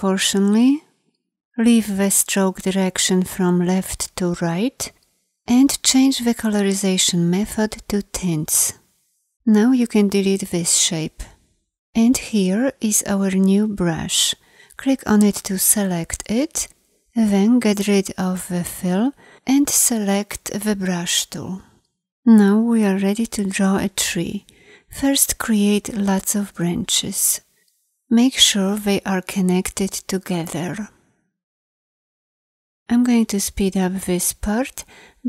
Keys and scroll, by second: 20.6 b.